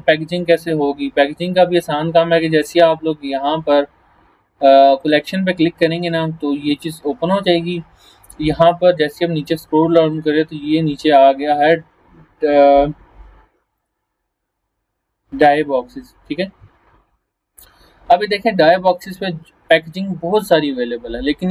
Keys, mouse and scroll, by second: 1.1-1.7 scroll down 2, 2.8 scroll up 1, 5.0 click, 5.8 scroll down 1, 13.8 click, 17.0 scroll down 1, 17.8 scroll up 1, 21.0 scroll up 1.